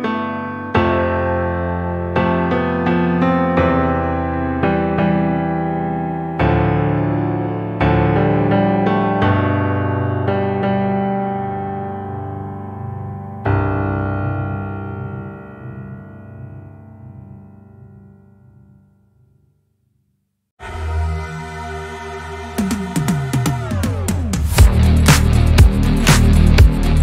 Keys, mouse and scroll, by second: 0.9 shift+click, 2.2-2.8 scroll down 2, 2.8-4.0 middle drag, 4.0 alt+z, 5.0-6.6 shift+middle drag, 6.6 KP_1, 7.6-8.2 scroll up 1, 8.2 click, 12.1 Tab, 12.4-13.4 middle drag, 13.4-14.1 scroll down 5, 14.1 click, 14.4-15.0 middle drag, 15.0-15.4 scroll down 4, 15.4-17.1 middle drag, 17.1-18.0 scroll up 7, 18.0 click, 19.1-20.7 middle drag, 20.7 KP_1, 21.8-22.1 scroll up 5, 23.1 alt+z, 26.2 Delete, 26.5 click.